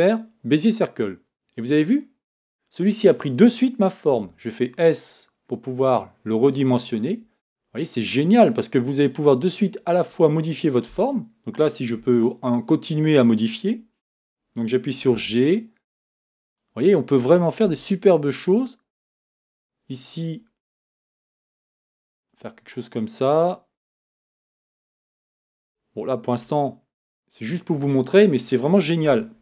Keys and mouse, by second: 4.1 s, 7.6-9.6 drag, 9.6-12.0 right drag, 12.0 Tab, 12.8-15.1 right drag, 15.1 g, 17.2-20.2 drag, 17.6 g, 20.8 click, 21.1-22.3 drag, 21.1 r, 23.3-24.6 drag, 24.6 g, 25.2-26.3 drag, 26.4 KP_1, 29.1 Tab.